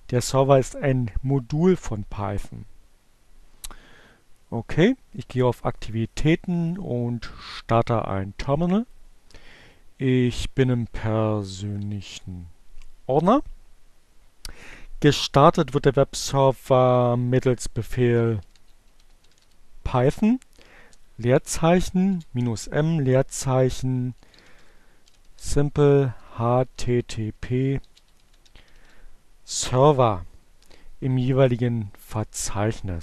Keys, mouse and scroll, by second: 9.6 click, 10.4-11.2 typing, 12.2 Return, 17.0-18.6 typing, 19.6-20.6 typing, 22.4-23.2 typing, 24.3-28.4 typing, 30.1 Return.